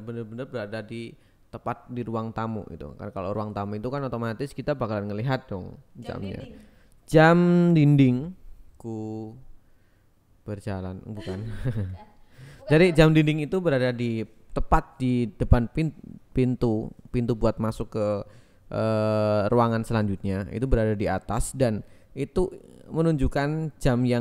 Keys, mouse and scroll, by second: 4.1 shift+a, 5.2 click, 5.9 click, 6.5 Tab, 7.5 click, 7.8 click, 8.9 e, 10.4 click, 11.8 click, 12.4 ctrl+b, 13.8 click, 14.1 KP_1, 14.3 Tab, 15.4-16.8 drag, 18.4 ctrl+s, 19.0 click, 19.5 x, 20.5 click, 21.1 shift+a, 22.8-24.2 typing.